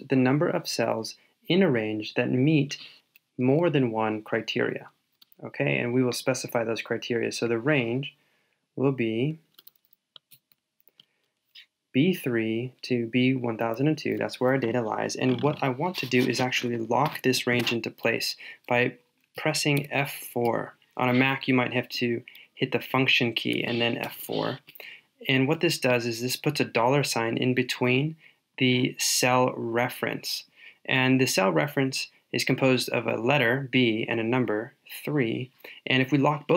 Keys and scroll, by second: 10.3 super+v.